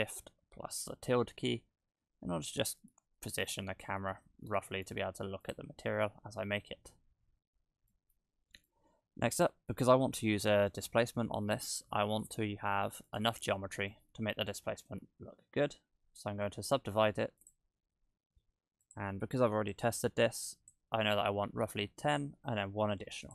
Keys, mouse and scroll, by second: 1.1-2.3 scroll up 6, 2.6 shift+`, 5.7 scroll up 1, 6.4 shift+scroll up 1, 6.5-7.1 scroll down 2, 6.6-7.5 scroll up 2, 7.5-8.7 scroll down 7, 7.9 middle click, 8.7 middle click, 13.1 right click, 13.8 Tab, 14.4 a, 15.1 w, 18.8 click, 19.7 click, 22.0 w.